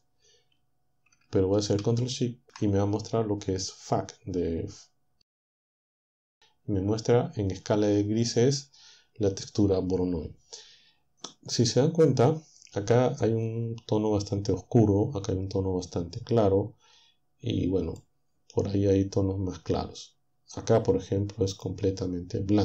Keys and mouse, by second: 2.8 ctrl+shift+click, 17.9 click, 20.3 click, 20.8-21.8 middle drag.